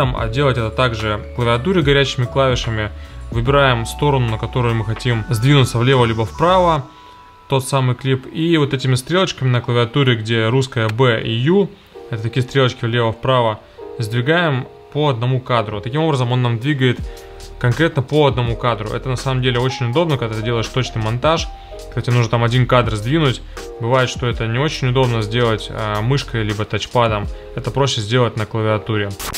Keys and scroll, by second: 13.1 ,, 18.4 ., 24.3 ,, 27.6 ,.